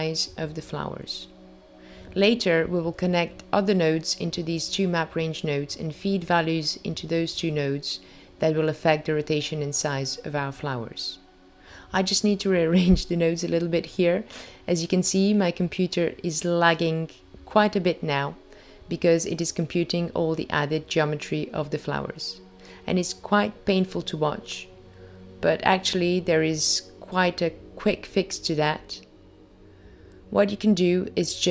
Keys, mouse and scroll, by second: 0.1-1.1 scroll down 1, 1.3 click, 2.3 click, 9.5 click, 10.2 click, 13.0 click, 13.7 click, 22.3 shift+right click, 24.2 click, 30.1 click.